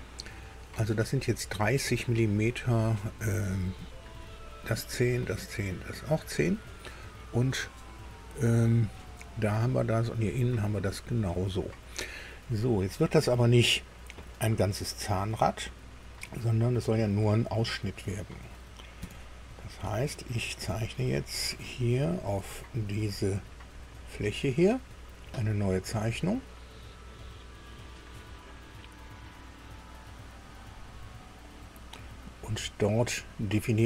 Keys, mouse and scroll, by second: 6.8-9.7 drag, 9.9-12.0 drag, 12.0-12.8 scroll down 2, 19.0 KP_2, 20.0 shift+middle click, 21.0 shift+scroll up 1, 22.3 click, 23.8 scroll up 1, 23.9 middle click, 27.2 click.